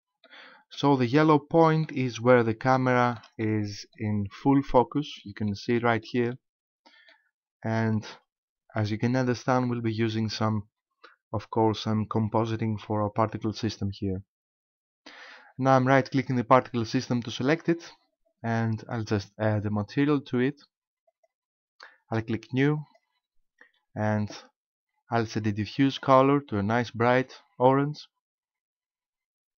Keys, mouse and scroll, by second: 1.1 middle click, 2.7 shift+middle click, 3.4 middle click, 5.5 shift+middle click, 6.3 middle click, 17.5 right click, 21.1 click, 22.8 click, 25.9 click.